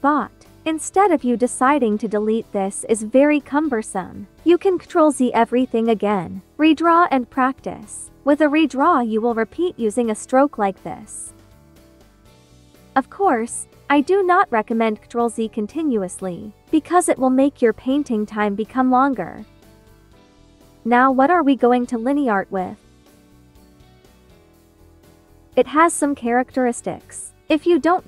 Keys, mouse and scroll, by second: 1.4 e, 1.9-3.8 drag, 3.6 ctrl+z, 5.1 b, 5.6 click, 5.9 ctrl+z, 6.0 ctrl+click, 6.6 ctrl+z, 7.0 ctrl+click, 7.4 ctrl+z, 7.5 ctrl+click, 8.2 ctrl+z, 8.6 ctrl+click, 8.9 ctrl+z, 9.1 click, 10.6 ctrl+z, 11.2 click, 12.3 ctrl+z, 12.5 click, 13.2 ctrl+z, 16.2 ctrl+z, 16.9 space, 17.2 click, 17.4 space, 20.6 space, 21.9-24.8 drag, 26.5 space, 26.7 click.